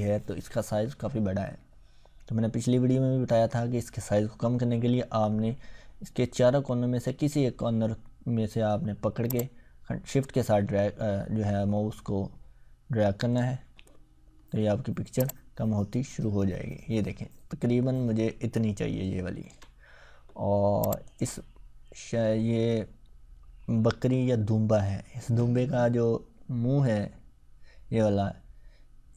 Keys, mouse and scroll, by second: 9.3-13.4 drag, 15.2-19.6 shift+drag.